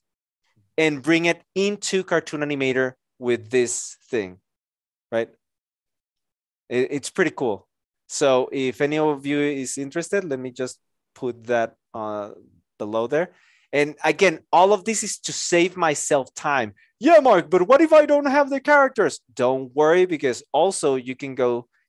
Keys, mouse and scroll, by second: 9.0 ctrl+c, 10.7 ctrl+v, 10.9 Return.